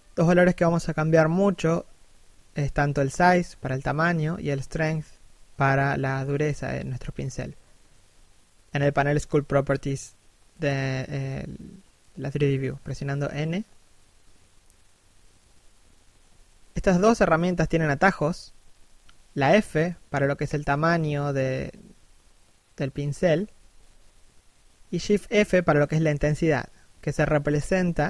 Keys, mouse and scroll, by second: 0.6 click, 3.4 click, 4.7 middle click, 5.3 scroll up 1, 6.0 click, 7.8 middle click, 8.2 scroll down 1, 8.4 middle click, 9.5 3, 9.8 1, 10.1 scroll down 1, 10.6 shift+middle click, 12.2 click, 13.7 middle click, 15.0 3, 15.3 1, 18.8 f, 20.4 click, 21.1 f, 21.6 click, 22.4 click, 24.3 f, 24.7 click, 25.8 shift+f.